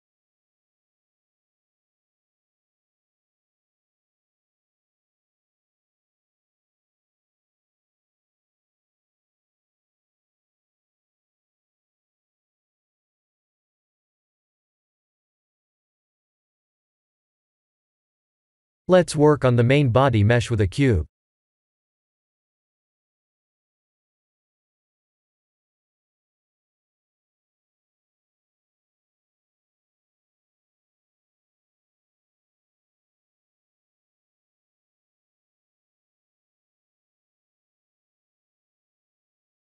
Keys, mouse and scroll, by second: 3.6 middle click, 3.7 middle click, 3.9 middle click, 4.0 middle click, 4.8-5.9 scroll up 10, 5.9 middle click, 9.3-9.6 scroll down 4, 9.8 click, 10.0 middle click, 10.7 middle click, 13.4 ctrl+s, 14.2 click, 14.8 click, 15.4 KP_1, 17.5 KP_7, 18.3 s, 20.2 g, 22.9 shift+middle click, 26.4 shift+middle click, 27.2 click, 27.5 shift+a, 31.5 s, 35.1 shift+middle click, 35.2 shift+middle click, 35.5 shift+middle click, 35.6 middle click, 37.1 s, 38.5 middle click, 39.2 scroll down 3, 39.5 middle click.